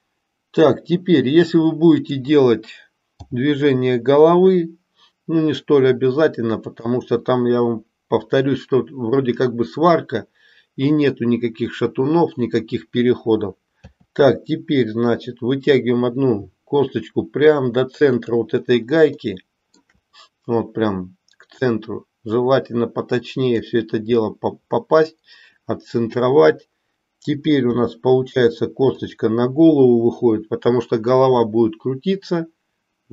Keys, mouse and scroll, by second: 3.2 g, 13.8 e, 19.3 shift+middle click, 21.5 click, 22.1-23.4 drag, 27.7 e.